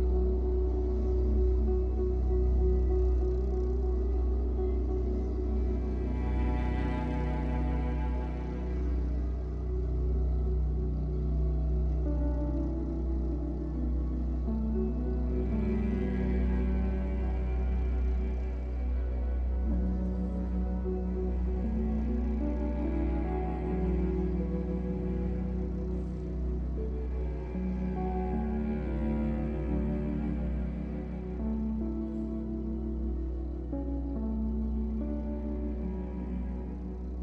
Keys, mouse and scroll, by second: 1.3-4.2 shift+middle drag, 4.2-15.4 drag, 15.4-16.5 middle drag, 16.5-18.7 drag, 18.7-21.0 middle drag, 19.0 scroll down 2, 19.8-20.6 scroll up 2, 20.6 f, 21.0 click, 21.6-27.2 shift+drag, 27.1 scroll down 2, 27.2 shift+middle click, 28.1-31.3 shift+drag, 31.3-34.7 shift+middle drag, 31.5-32.0 scroll up 2, 33.0 f, 34.7-36.6 drag, 36.4 scroll down 1, 36.6-37.2 shift+middle drag.